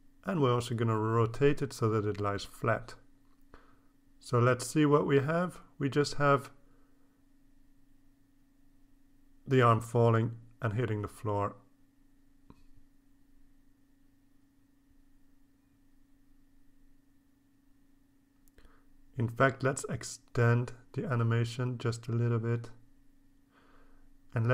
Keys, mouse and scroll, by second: 0.3-2.6 drag, 4.8-6.6 drag, 8.2 click, 9.4 click, 10.3 click, 11.5 scroll up 1, 11.9 scroll down 1, 12.8-15.7 drag, 16.9-19.4 drag, 20.2 click, 20.7 scroll down 1, 22.2 click, 22.8 click, 24.3-24.5 scroll down 1.